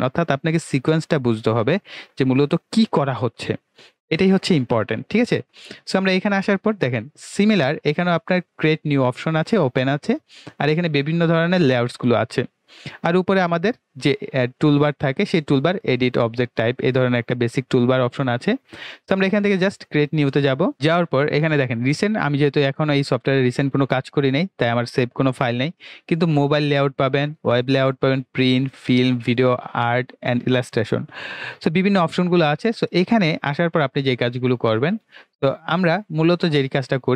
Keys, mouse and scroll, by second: 20.7 click, 24.3 click, 35.1-37.1 drag.